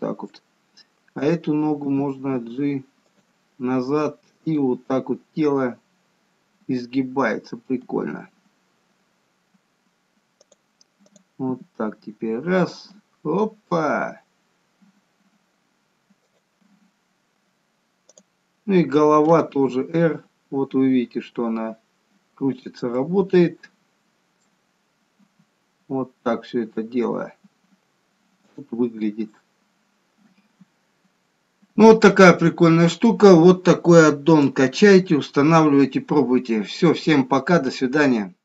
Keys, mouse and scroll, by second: 1.5 click, 2.2 g, 4.8 click, 5.0 g, 11.4 click, 11.9 g, 18.4 click, 19.9 r, 23.2 middle click, 25.0-25.7 scroll up 2, 25.7-26.3 scroll up 1, 25.7 r, 29.2 scroll down 2, 29.5 middle click, 31.2 scroll down 3, 32.4 middle click, 35.9-38.4 scroll up 1.